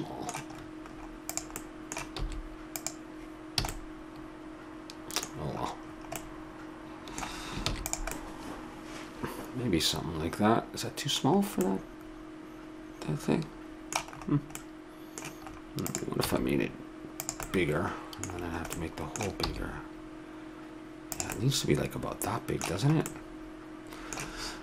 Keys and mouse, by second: 1.3-3.0 right drag, 2.2 s, 3.0 click, 3.6 a, 7.7 ctrl+s, 11.3-13.4 middle drag, 14.6-15.9 middle drag, 15.9 right click, 16.2 s, 19.5 s.